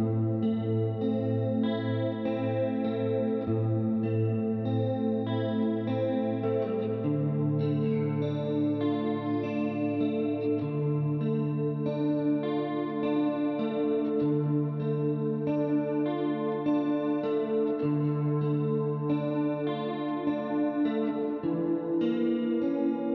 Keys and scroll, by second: 20.0-23.1 typing.